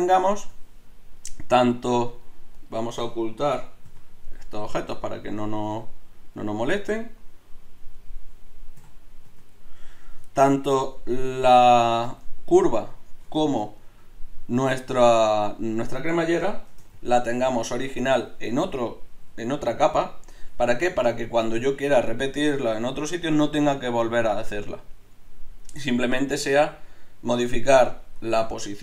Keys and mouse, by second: 0.4 z, 3.9 h, 4.6 h, 5.7 h, 6.6 h, 8.9 h, 9.3 z, 16.7 shift+d, 28.2 Tab.